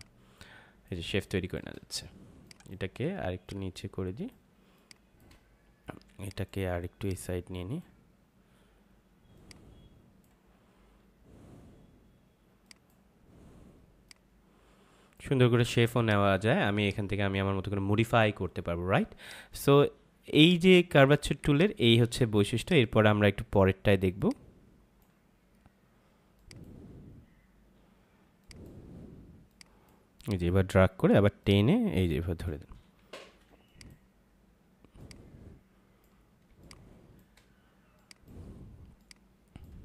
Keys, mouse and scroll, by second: 1.0 space, 1.2 click, 1.5 space, 2.4 click, 4.6 space, 4.7 click, 5.1 space, 6.2 click, 21.3 space, 21.5 click, 21.8 space, 22.5 click, 32.9 space, 33.6 click, 36.4 space, 36.6 click, 37.2 space, 37.9 click.